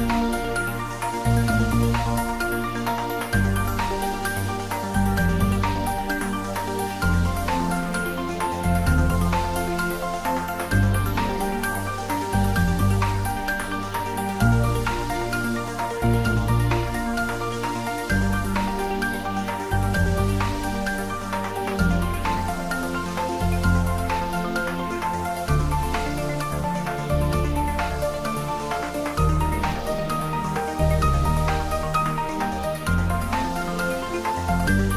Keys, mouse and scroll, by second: 3.8 scroll up 1, 8.6 click, 9.7 s, 11.4 click, 11.8 scroll up 1, 13.0 g, 14.8 z, 16.0 click, 16.6 ctrl+z, 17.4 e, 20.5 click, 21.2 i, 24.1 click, 24.4 scroll up 1, 26.4 3, 27.1-28.1 scroll down 1, 28.1 s, 28.9 click, 29.8 g, 33.4 click, 34.0 e.